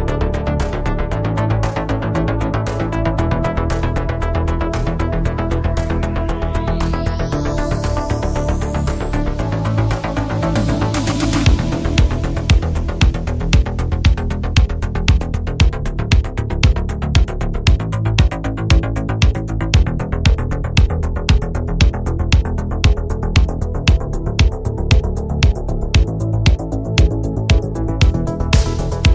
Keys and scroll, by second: 20.5 ctrl+z, 21.8 ctrl+z.